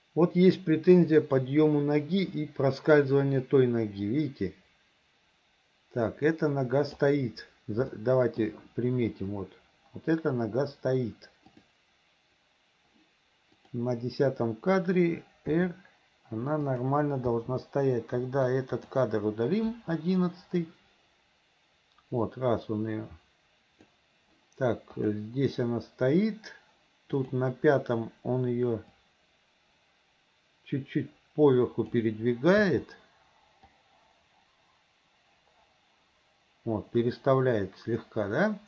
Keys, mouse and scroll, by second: 8.0 shift+middle click, 11.5 click, 13.7 click, 15.5 r, 17.4 i, 18.5-19.0 drag, 19.8 Delete, 20.7-24.0 drag, 25.0 click, 27.2 click, 29.0 click, 29.3-32.0 drag, 32.6 i, 33.8-38.6 drag.